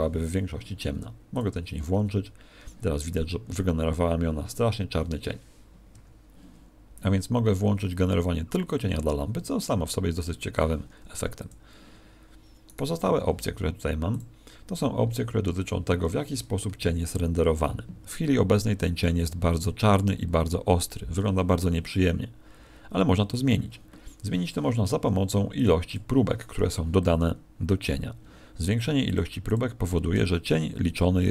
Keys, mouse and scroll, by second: 1.2 click, 5.8 Escape, 11.2 x, 12.6 right click, 14.0 click, 15.7 scroll down 5.